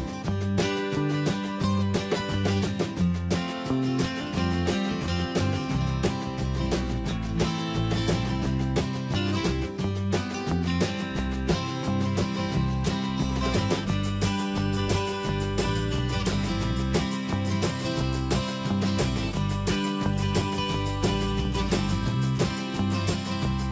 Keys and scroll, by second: 11.8 ctrl+[, 16.0 Return, 23.6 ctrl+space.